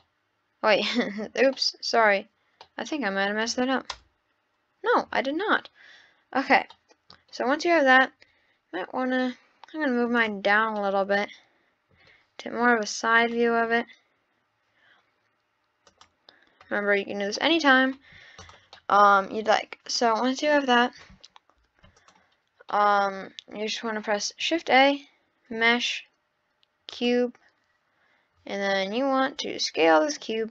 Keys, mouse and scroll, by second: 0.0-1.4 middle drag, 1.4 scroll down 1, 1.5-3.9 middle drag, 3.9 KP_0, 6.7 middle click, 7.4-7.9 scroll down 4, 7.9 click, 9.3 click, 10.8-13.2 middle drag, 13.2-16.2 drag, 17.4-17.8 middle drag, 18.4 click, 18.8-20.5 middle drag, 20.5 click, 21.6 x, 22.6 scroll up 1, 22.7-24.4 middle drag, 24.4 shift+a, 29.4 s.